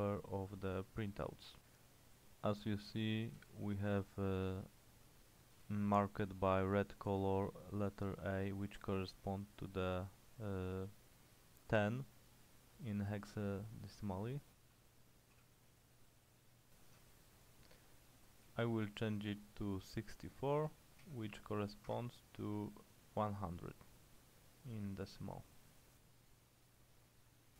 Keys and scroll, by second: 0.7 j, 3.2-4.1 typing, 5.4-6.2 typing, 15.4 h, 18.3-19.0 typing, 20.7-21.1 typing, 22.0 Escape.